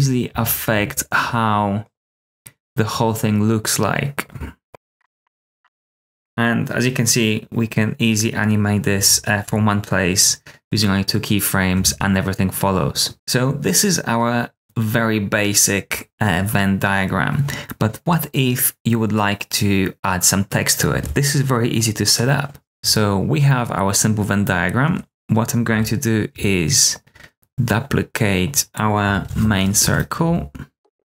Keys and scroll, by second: 0.0-0.7 typing, 4.4-5.5 typing, 11.7 space, 13.1 super+w, 29.2 super+d, 29.7 Return, 29.9 Tab, 30.2-31.0 typing.